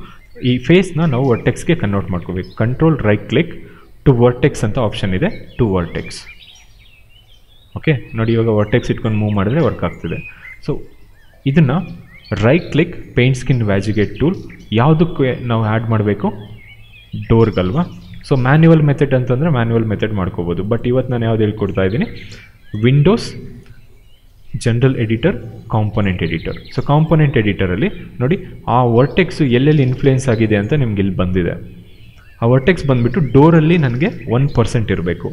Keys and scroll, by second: 9.7 ctrl+z.